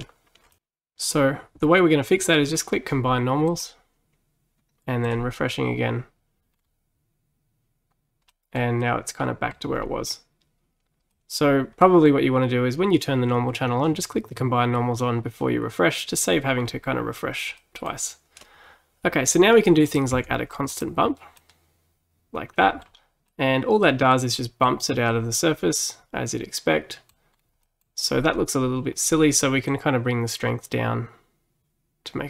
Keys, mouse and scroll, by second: 3.5 click, 5.1-6.6 drag, 6.6-7.0 scroll down 3, 7.3 scroll down 1, 8.3-9.7 middle drag, 9.7-10.7 scroll up 4, 11.2-14.9 middle drag, 16.7-17.6 scroll down 2, 17.6-19.9 middle drag, 19.9 click, 21.4-22.9 middle drag, 22.9-23.3 scroll up 1, 23.3-27.4 middle drag, 27.4-27.7 scroll down 2, 27.7 middle click, 28.3-29.7 scroll up 3, 29.7-32.2 drag.